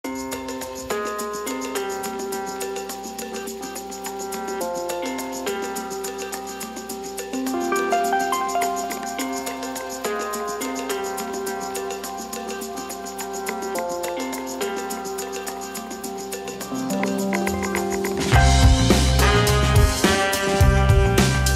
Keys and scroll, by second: 3.2 KP_Decimal, 3.8 KP_3, 4.0 KP_7, 4.1 KP_5, 14.1 Delete, 15.7 Delete, 17.9 Delete, 20.6 Delete.